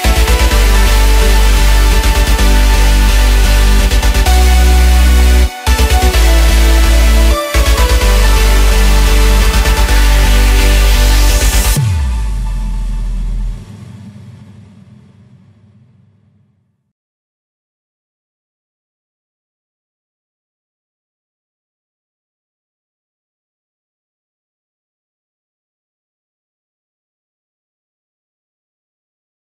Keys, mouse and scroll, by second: 0.2-2.5 middle drag, 2.5 KP_1, 3.4-4.6 scroll up 1, 4.6 click, 9.8 scroll down 1, 10.0-12.2 middle drag, 12.2 shift+s, 14.9-16.3 middle drag, 16.3-19.1 drag, 19.1 s, 22.2-23.7 middle drag, 23.7 s, 25.0-26.5 middle drag, 26.5-27.0 scroll up 3, 27.0 scroll down 3, 27.3-29.5 middle drag.